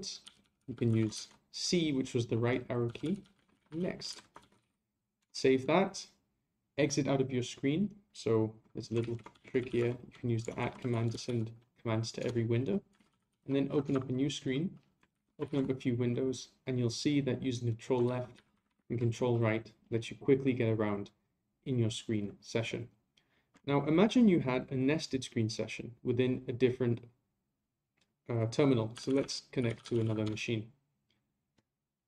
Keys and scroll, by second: 4.1 ctrl+c, 9.0 ctrl+a, 15.1 ctrl+a, 15.4 ctrl+c, 18.0 ctrl+Left, 18.3 ctrl+Left, 18.5 ctrl+Right.